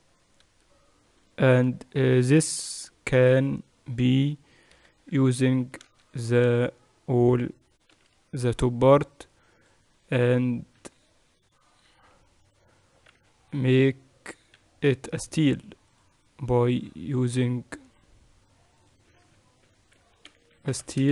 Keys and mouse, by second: 0.0 click, 0.7-5.7 middle drag, 5.7 KP_1, 6.2 Tab, 6.4 z, 7.1 a, 8.6 b, 11.6 ctrl+KP_Add, 12.7 ctrl+KP_Subtract, 13.8 z, 16.5-21.1 drag.